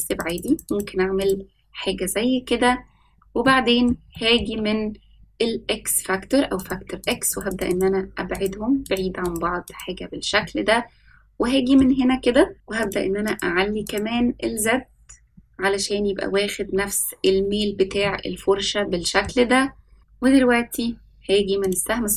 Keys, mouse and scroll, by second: 0.0 click, 0.2 click, 0.4 click, 0.6 click, 1.1 click, 3.4 middle click, 4.1 shift+middle drag, 6.5 click, 7.0 click, 7.4-8.9 drag, 9.2 click, 9.6 click, 10.3-11.7 middle drag, 12.8 click, 13.2 click, 13.8 click, 18.0-19.2 middle drag, 20.0 middle click, 21.6-22.1 drag.